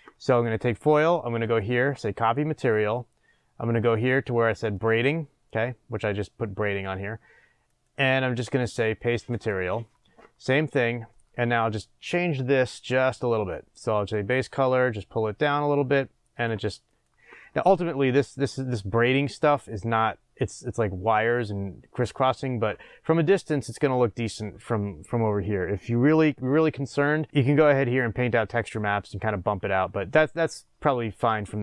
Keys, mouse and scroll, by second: 0.4 click, 4.7 click, 9.4-14.9 drag, 17.7-18.6 scroll up 1, 22.9-23.6 scroll down 1, 26.9-27.6 scroll up 1, 30.1-30.6 scroll down 1, 31.0-31.6 middle drag.